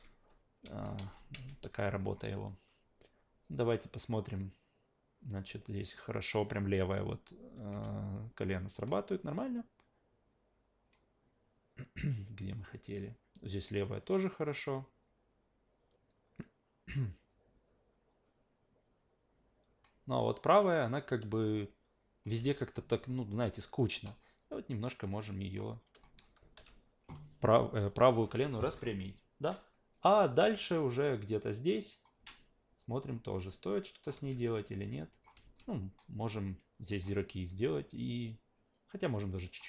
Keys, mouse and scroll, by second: 0.7 ctrl+z, 1.0 ctrl+z, 1.3 ctrl+z, 2.0 click, 3.4-6.5 drag, 7.7 q, 8.9-22.2 drag, 22.4 e, 24.4 click, 26.0 alt+middle click, 26.6 a, 29.9-32.0 drag, 33.1 click, 34.1 ctrl+z, 34.6 click, 35.4 ctrl+z, 36.2 click, 37.1 alt+middle click, 38.7 click.